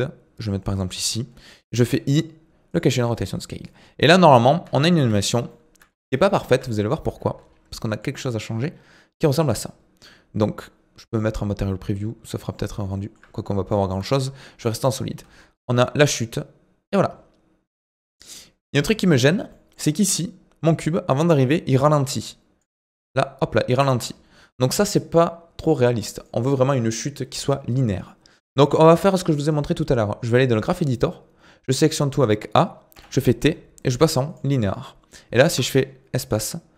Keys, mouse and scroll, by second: 3.6 click, 4.5 scroll down 2, 4.7 shift+middle click, 5.1-5.5 scroll up 2, 5.5 shift+middle click, 5.9-6.3 scroll up 1, 6.3-7.5 shift+middle drag, 7.5 scroll down 1, 7.7-10.7 shift+middle drag, 11.8 click, 12.2 middle click, 12.6-12.9 scroll up 1, 12.9 shift+middle click, 13.8 click, 14.1 shift+middle click, 14.7-15.2 scroll down 1, 15.2 space, 18.9 space, 19.5 middle click, 19.8-20.7 scroll up 2, 20.7-22.8 drag, 22.8 space, 23.8 space, 24.4-27.5 drag, 29.4-31.3 drag, 31.3-31.6 scroll down 2, 31.6 a, 32.9 t, 35.4 space.